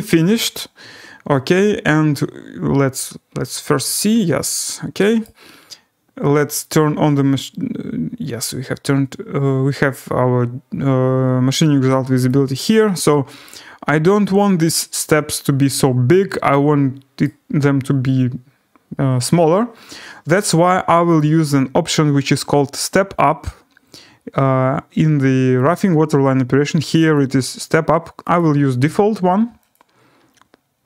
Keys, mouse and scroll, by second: 5.2-9.7 right drag, 12.2 click, 13.4 right click, 13.6 scroll, 14.7 right click, 17.2 right click, 17.4 scroll, 18.1 scroll, 19.0-19.7 scroll, 21.1 click, 25.7 click, 27.1 click, 28.4 click, 29.7 click.